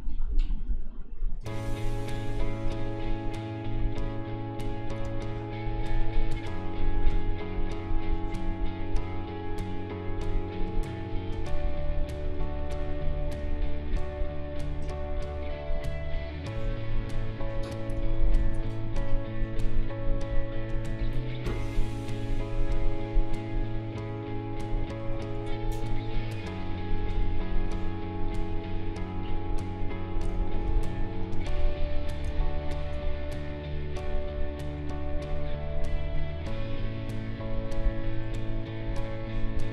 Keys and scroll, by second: 5.0 space, 17.9 space, 24.8 space, 30.3 space.